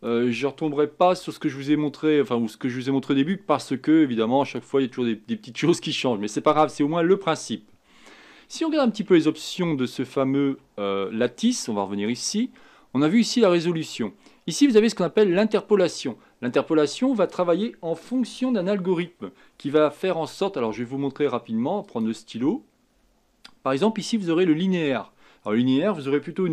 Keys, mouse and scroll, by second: 1.1 s, 9.1 Tab, 12.0 click, 21.8-26.5 drag.